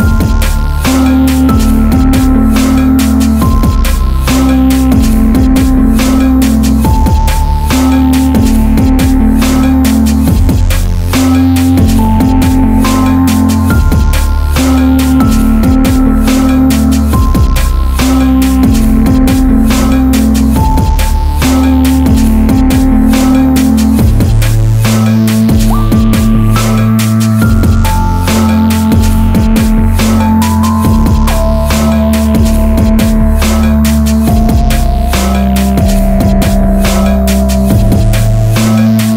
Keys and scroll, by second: 8.0 ], 8.5 Tab, 9.3 Caps_Lock, 9.8 ], 37.2 ctrl+z, 38.6 [.